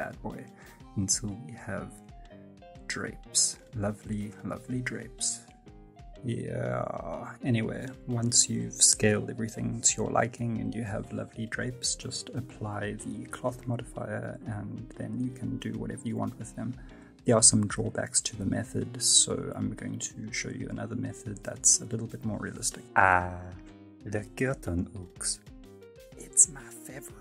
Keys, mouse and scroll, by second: 0.3 middle click, 0.7 scroll up 4, 0.9 scroll down 2, 1.2 right click, 1.3 s, 2.6 scroll down 1, 2.8 middle click, 3.2 right click, 3.4 right click, 3.5 s, 3.8 right click, 4.0 s, 5.1 right click, 5.2 g, 7.3 F9, 7.4 space, 7.7 right click, 7.8 s, 8.2 right click, 8.3 s, 9.6 right click, 9.7-17.5 typing, 10.1 right click, 11.0 middle click, 11.2 shift+middle click, 11.2 middle click, 11.2 scroll up 4, 11.4 shift+middle click, 11.4 scroll down 3, 11.8 scroll up 1, 12.6 right click, 12.7 click, 12.8 click, 12.9 scroll down 2, 12.9 middle click, 13.1 middle click, 13.4 middle click, 13.5 middle click, 14.4 middle click, 14.5 scroll down 2, 14.6 middle click, 15.0 shift+right click, 15.1 shift+right click, 15.4 shift+middle click, 15.5 right click, 15.6 shift+right click, 15.9 shift+middle click, 16.0 right click, 16.0 shift+right click, 16.1 shift+right click, 16.5 click, 17.5 scroll up 3, 17.7 shift+middle click, 17.7 scroll down 1, 17.8 middle click, 17.9 middle click, 18.1 click, 18.2 click, 18.3 click, 18.4 middle click, 18.4 scroll down 4, 18.6 middle click, 18.9 right click, 19.0 right click, 19.2 shift+right click, 19.3 shift+right click, 19.4 alt+click, 19.4 alt+click, 19.6 right click, 19.7 click, 19.8 right click, 19.8 click, 20.0 click, 20.0 click, 20.1 scroll up 5, 20.2 right click, 20.3 shift+middle click, 20.3 middle click, 20.4 scroll down 3, 20.4 shift+middle click, 20.6 click, 20.7 middle click, 20.9 right click, 20.9 right click, 21.0 shift+right click, 21.1 click, 21.3 right click, 21.8 middle click, 21.9 scroll down 2, 22.0 shift+middle click, 22.1 shift+s, 22.5 scroll up 3, 22.5 middle click, 22.6 shift+middle click, 22.7 middle click.